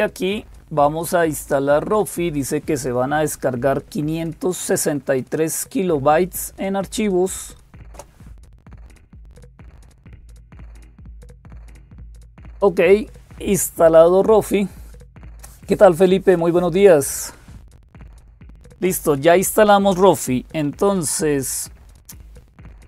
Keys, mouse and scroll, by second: 0.0-22.8 typing, 7.7 Return.